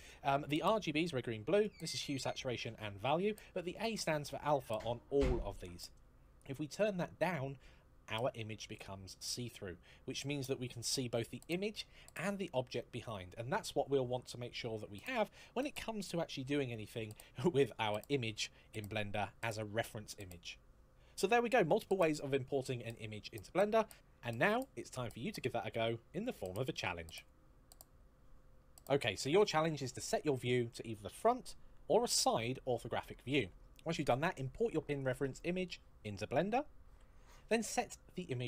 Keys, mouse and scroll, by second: 0.5 click, 4.0 click, 6.6 click, 9.3 middle click, 10.6 KP_1, 11.4 scroll up 1, 12.0-12.4 scroll down 1, 12.8-14.5 scroll up 1.